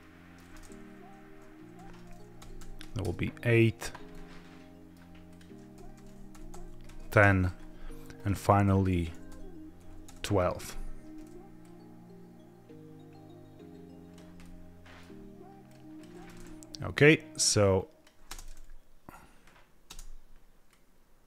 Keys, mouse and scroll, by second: 1.7 a, 2.3 g, 2.5 x, 2.7 KP_8, 2.9 KP_Enter, 4.0-4.9 middle drag, 5.2 drag, 5.6-6.9 typing, 7.1 KP_Enter, 8.0 click, 8.5-9.8 typing, 9.9 KP_Enter, 11.5-14.0 drag, 14.3-15.0 middle drag, 15.5-15.9 drag, 17.5-17.9 drag, 18.2 space, 19.8 space, 20.6-21.2 drag.